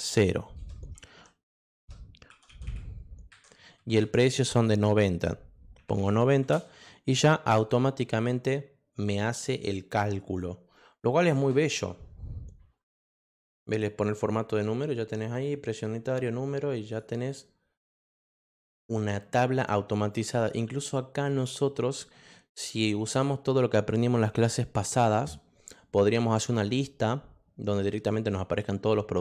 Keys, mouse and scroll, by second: 0.0-0.5 typing, 1.8-3.2 typing, 5.5-6.4 typing, 9.4 click, 11.7 middle click, 14.2 click, 15.3 click, 16.9 click, 17.9 click, 18.4 click, 18.8 middle click, 20.1 click, 20.7 middle click.